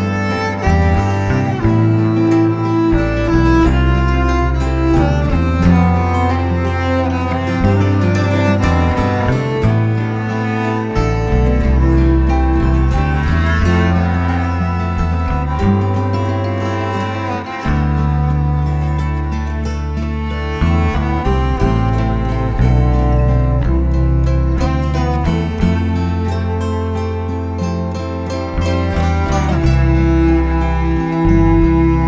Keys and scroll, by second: 11.2 Escape, 11.9-14.8 typing, 12.2 Return, 12.2 Escape, 13.8 Escape, 15.9 Escape, 16.4-19.4 typing, 20.6 Escape, 20.7 Escape, 24.8 Escape, 24.9 Escape, 25.8 Escape, 25.8 b, 27.0 space.